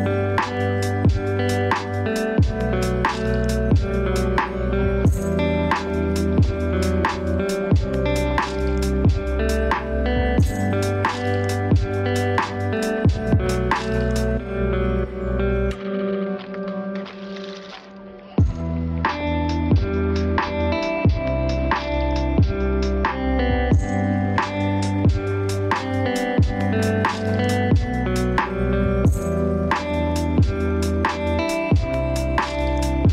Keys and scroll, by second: 14.9 ctrl+space, 32.0 ctrl+space.